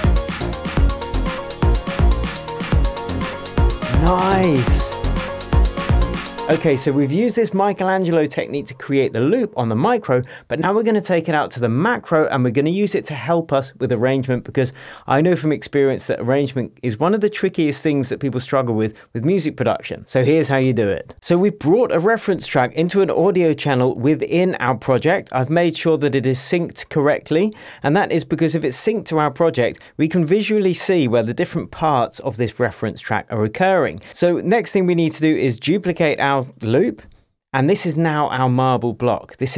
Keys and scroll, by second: 27.7 shift+Tab, 37.0 super+d.